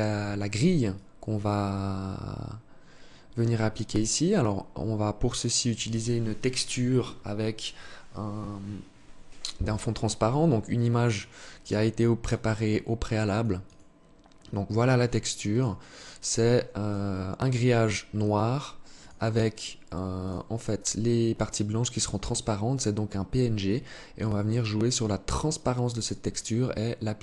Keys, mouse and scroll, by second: 0.1 alt+click.